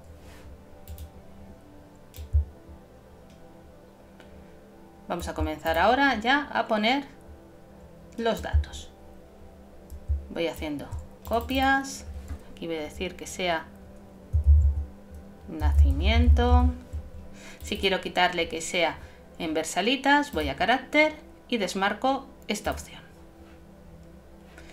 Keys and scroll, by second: 14.2-15.1 typing.